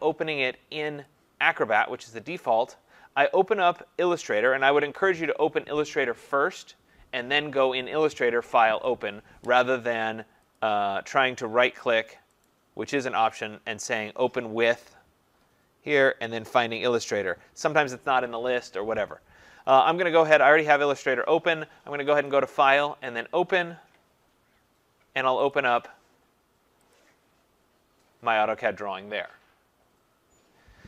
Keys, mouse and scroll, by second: 1.1-4.5 drag, 10.6 click, 12.4 right click, 20.5 click, 22.2 click, 23.2 click, 25.6 click, 26.9 click.